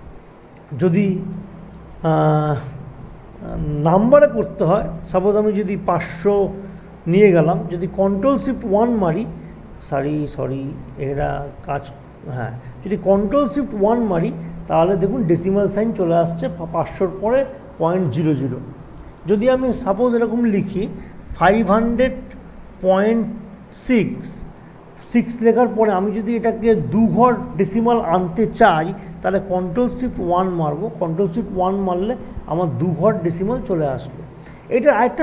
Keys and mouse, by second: 4.3 click, 5.8 typing, 8.0 typing, 8.7 ctrl+shift+1, 10.8 click, 10.9 click, 15.5 click, 20.8 click, 21.7 5, 23.8 typing, 25.0 click, 29.3 click, 34.1 click.